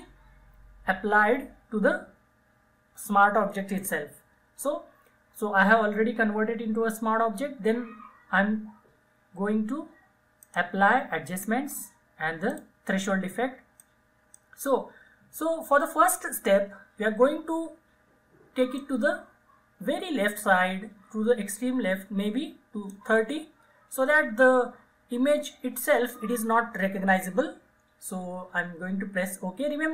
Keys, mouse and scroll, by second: 10.5-16.7 drag, 18.8-29.9 drag.